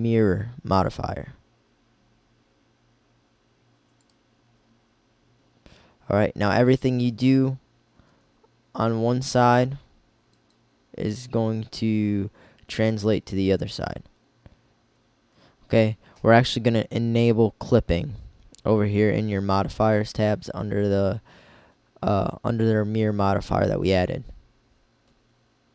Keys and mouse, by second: 8.2 g, 10.7-12.3 drag, 14.9 ctrl+z.